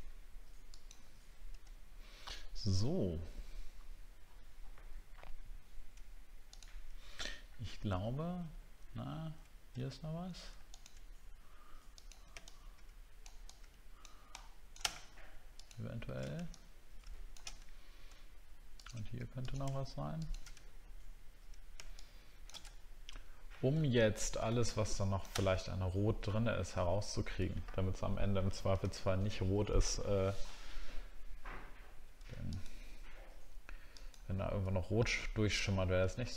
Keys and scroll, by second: 1.8 alt+scroll down 1, 2.6 alt+scroll down 1, 3.8 alt+scroll up 1, 4.2-5.2 alt+scroll down 4, 7.8 alt+scroll up 1, 8.4 alt+scroll up 1, 9.0 alt+scroll up 2, 9.8 alt+scroll up 1, 22.7 alt+scroll down 5, 23.9 alt+scroll down 1, 25.7 alt+scroll down 1, 26.8 alt+scroll down 1, 28.8 alt+scroll down 1.